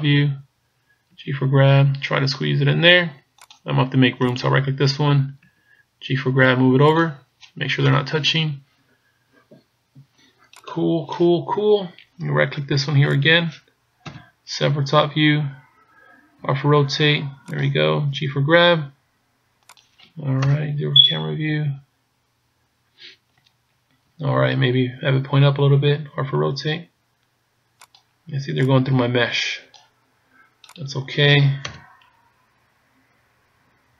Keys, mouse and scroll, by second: 1.1 g, 4.3 right click, 5.5 g, 7.8 KP_0, 10.7 right click, 13.2 right click, 14.1 KP_7, 16.7 r, 18.3 g, 20.4 KP_0, 24.1 KP_1, 26.4 r, 28.0 click, 28.7 click, 30.7 right click, 31.7 KP_0.